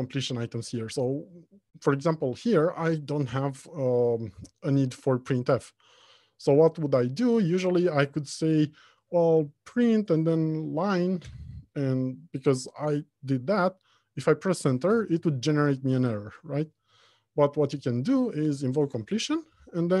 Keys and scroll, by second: 9.9 ctrl+space, 15.0 ctrl+space, 15.2 Return, 17.1 ctrl+z, 17.7 ctrl+space.